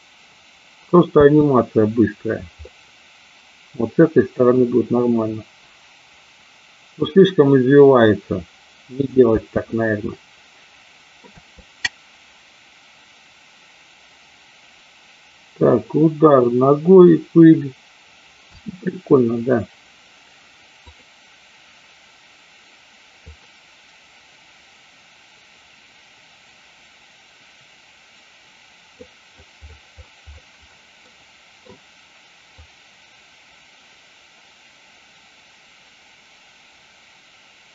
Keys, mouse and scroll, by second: 2.8-4.7 middle drag, 9.6 space, 9.8-19.0 middle drag, 11.3 space, 18.7 space, 20.9 click, 23.4-29.2 drag, 31.2-31.5 middle drag, 32.8-37.7 drag.